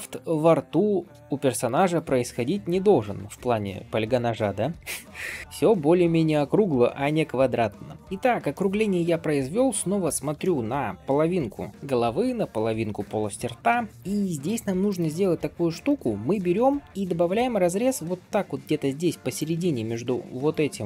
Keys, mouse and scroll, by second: 1.8 shift+middle drag, 2.3-2.9 middle drag, 3.2 shift+middle click, 3.6-4.1 scroll up 2, 4.0 click, 4.5 scroll down 1, 4.7-5.0 shift+middle drag, 5.0 g, 5.9 middle click, 6.8 shift+middle click, 7.2 middle click, 8.0 scroll down 1, 8.4-9.9 middle drag, 10.3 shift+middle drag, 10.7 scroll down 1, 13.8 shift+middle drag, 13.9-14.3 scroll up 4, 14.7 middle click, 15.2 Tab, 15.7 middle click, 17.2 ctrl+r.